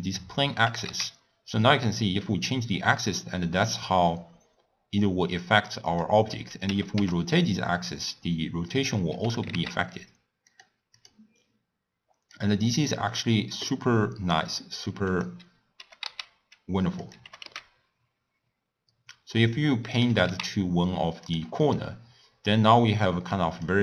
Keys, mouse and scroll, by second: 0.2 click, 0.7 g, 6.7 r, 9.3 g, 11.0 click, 12.4-15.2 drag, 15.8 g, 17.2 g, 20.1 g, 21.7-23.6 middle drag, 23.6 click.